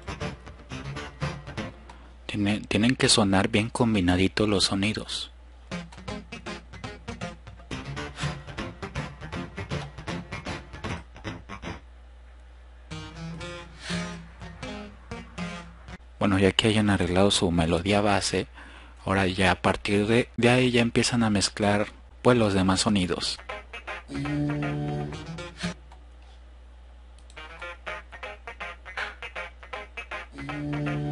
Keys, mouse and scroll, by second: 5.5 click, 12.5-13.1 scroll up 2, 13.1 click, 15.9-16.3 drag, 16.4 drag, 16.6 click, 17.0-17.4 drag, 23.4-24.2 drag, 26.4 drag, 27.4 click.